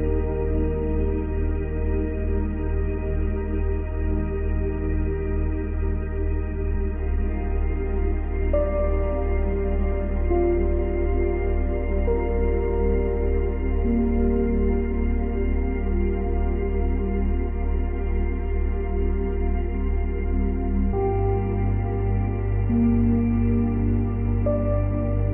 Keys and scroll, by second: 0.8 space, 7.5 Delete, 9.2 ctrl+z, 12.7 space, 14.2 space, 16.9 space, 18.4 space, 24.3 space.